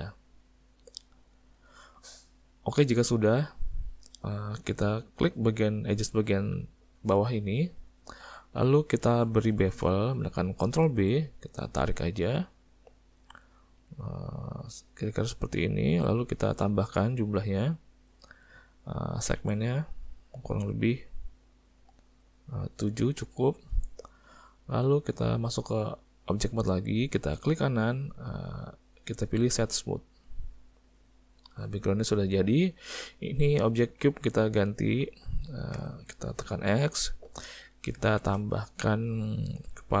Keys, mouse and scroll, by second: 2.2 middle click, 3.1 middle click, 7.5 click, 8.5 middle click, 9.2 ctrl+middle click, 10.8 ctrl+b, 17.4 click, 19.4 click, 19.7 click, 19.9 click, 20.1 click, 20.3 click, 21.7 click, 24.3 Tab, 27.6 right click, 31.1 middle click, 32.0 middle click, 33.1 click, 34.2 click, 35.8 x, 38.2 shift+a.